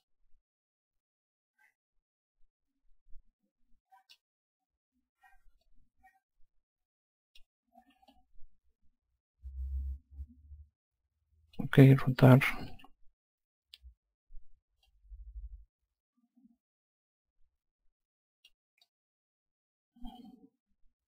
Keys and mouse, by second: 0.4 alt+click, 6.0 click, 8.5 click, 13.1 r, 15.2 click, 19.2 alt+click.